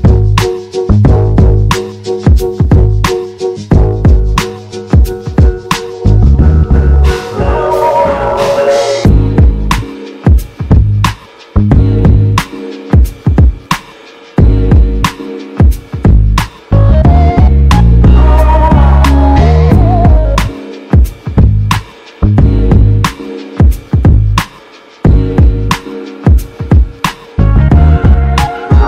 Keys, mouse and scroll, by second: 1.4 e, 11.6 e, 15.4 r, 21.7 g.